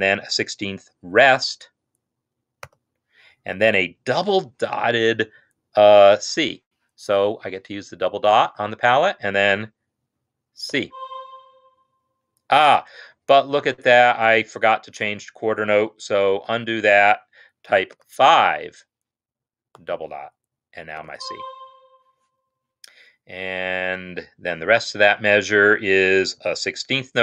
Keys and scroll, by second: 2.6 0, 10.8 c, 16.4-18.2 ctrl+z, 21.1 c, 26.4 3.